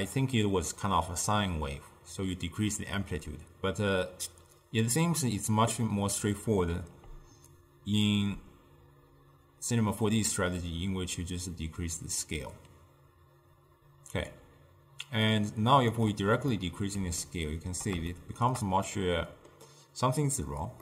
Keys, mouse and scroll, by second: 3.0 d, 7.6-10.7 shift+drag, 16.6-20.8 middle drag.